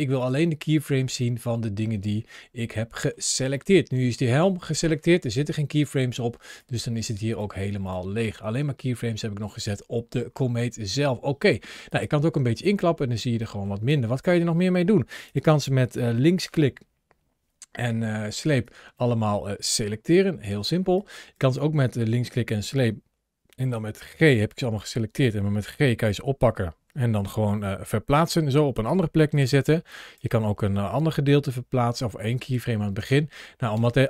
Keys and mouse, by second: 0.0 click, 1.1-1.7 middle drag, 2.7 shift+middle drag, 3.4 middle click, 6.4-7.2 drag, 7.7 click, 11.7 click, 13.2 middle click, 13.7-14.0 drag, 18.5 drag, 20.3 click, 20.8 click, 26.1 g, 28.6 click, 29.7 drag, 30.7 g, 32.2 click, 32.8 space, 33.6 space.